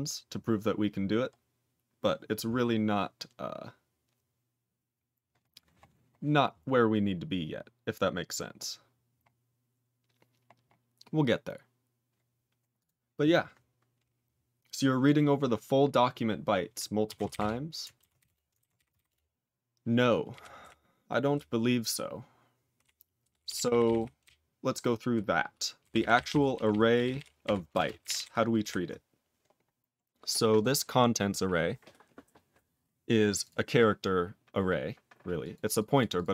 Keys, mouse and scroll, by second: 1.3 scroll down 2, 2.0 scroll down 3, 6.4-8.4 scroll down 2, 8.4 scroll up 8, 9.1 scroll up 4, 10.5 scroll up 4, 12.7 click, 13.3 click, 17.3 Return, 18.2 Return, 19.0 ctrl+Return, 20.3 ctrl+p, 20.5 ctrl+p, 21.3-22.8 ctrl+p, 23.2 ctrl+p, 23.3 ctrl+p, 23.5 ctrl+p, 23.6 ctrl+p, 23.8 ctrl+p, 23.9 ctrl+p, 24.2-25.1 ctrl+n, 25.8 ctrl+p, 25.9 ctrl+p, 26.1 ctrl+p, 26.2 ctrl+p, 26.3 ctrl+p, 26.5 ctrl+p, 26.6 ctrl+p, 27.0 ctrl+p, 27.1 ctrl+p, 27.4 ctrl+p, 27.7 ctrl+space, 27.7 ctrl+a, 28.0 ctrl+g, 28.0 ctrl+e, 28.1 ctrl+n, 28.5 ctrl+p, 29.1 ctrl+p, 29.5-30.0 scroll down 7, 30.5 click, 33.4 click, 35.3 click, 35.7 click, 35.9 click, 36.1 click.